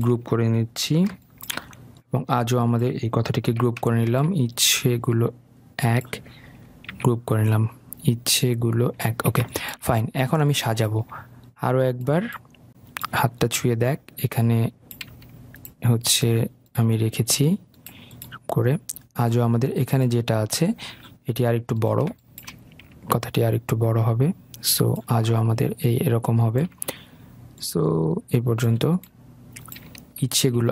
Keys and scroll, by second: 7.2 ctrl+g.